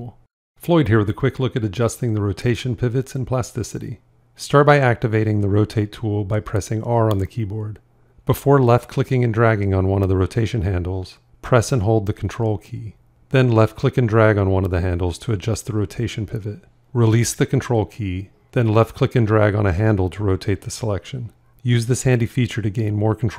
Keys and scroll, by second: 6.3 r.